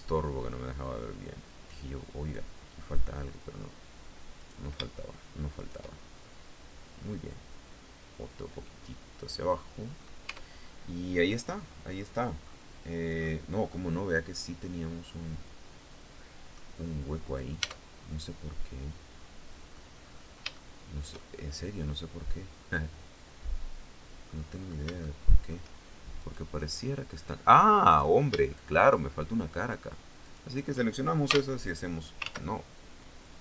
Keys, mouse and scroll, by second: 2.6 middle click, 3.9 right click, 5.1 shift+right click, 5.8 shift+middle click, 7.2-9.7 drag, 9.8 Tab, 10.1-10.6 scroll down 2, 11.2 scroll up 2, 11.5-11.8 scroll down 2, 12.0-12.3 scroll up 2, 12.7 scroll up 1, 13.2 middle click, 13.3 scroll up 1, 16.4 scroll up 1, 16.8 right click, 17.2 Tab, 17.6-19.5 middle drag, 19.5-19.9 scroll up 1, 20.1-24.0 shift+middle drag, 24.6 shift+middle click, 24.8 shift+scroll up 1, 25.7 right click, 27.4 right click, 28.0 shift+right click, 29.2 shift+right click, 29.8 shift+right click, 30.8 f, 31.8 ctrl+z.